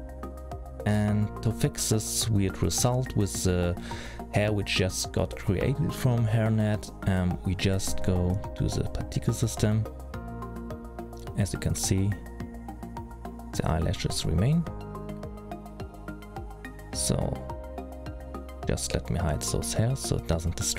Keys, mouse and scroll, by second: 1.6 middle click, 2.9-4.6 scroll up 2, 4.6-6.0 scroll down 1, 6.2 middle click, 9.3 click, 13.3 click, 14.3-14.6 scroll down 3, 14.6-15.7 scroll up 2, 16.9 click, 17.6 click, 19.3 click, 20.6 click.